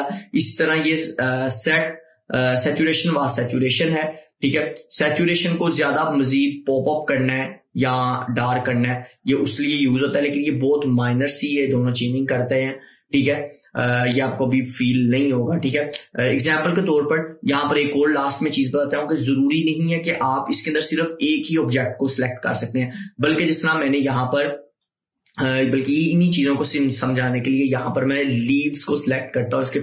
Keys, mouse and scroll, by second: 3.2 scroll down 1, 3.4 click, 17.4 scroll up 1, 18.5 scroll up 1, 20.0 scroll down 1, 20.6 scroll up 1, 22.6 scroll up 1, 23.8 scroll down 1, 27.8 click.